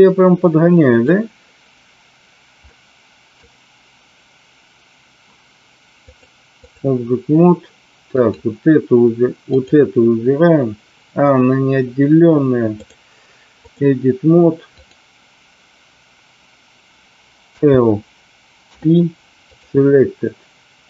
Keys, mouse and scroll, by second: 2.6 middle click, 6.1 click, 8.1 click, 12.8-13.8 drag, 17.5 l, 18.7 p.